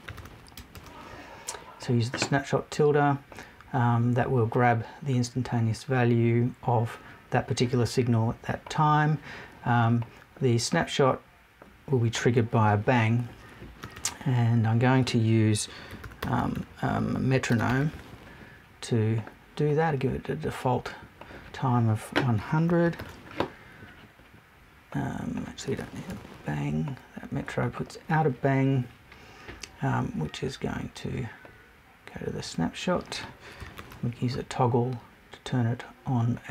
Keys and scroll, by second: 26.1 BackSpace.